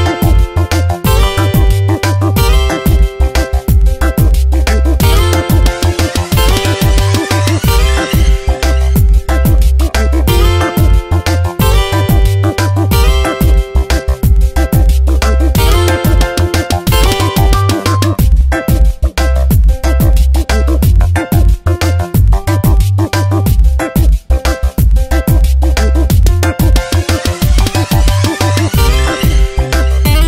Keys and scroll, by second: 0.5 Return, 0.9 v, 2.0 Tab, 2.7 space, 5.5 shift+p, 5.7 i, 6.8 BackSpace, 8.6 i, 9.3 BackSpace, 10.2 ctrl+t, 12.9 shift+p, 13.3 e, 16.1 ctrl+Return, 16.5 v, 18.1 Return, 18.5 b, 19.7 BackSpace, 20.0 shift+p, 20.4 i, 22.5 ctrl+a, 22.9 ctrl+shift+,, 25.5 ctrl+Return, 28.0 ctrl+t.